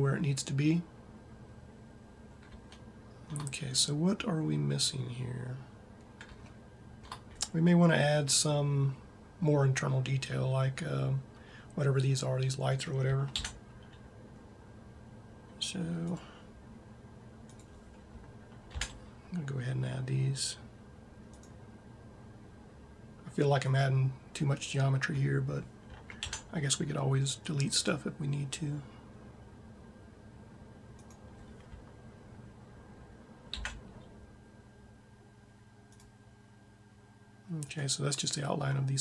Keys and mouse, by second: 1.8-3.3 middle drag, 6.2 middle click, 13.2 ctrl+r, 18.5 ctrl+r, 26.0 ctrl+r, 33.6 ctrl+r, 37.7-39.0 drag.